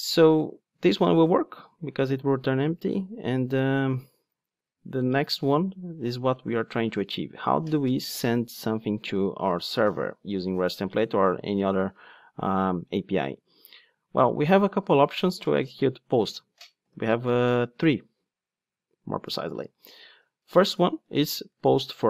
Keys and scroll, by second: 19.9 Return.